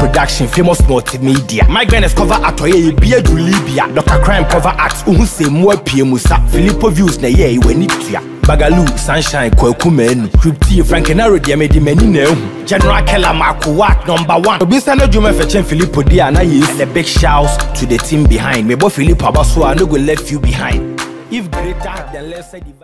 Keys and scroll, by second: 5.1 Return, 9.5 ctrl+Delete, 11.6 ctrl+shift+e.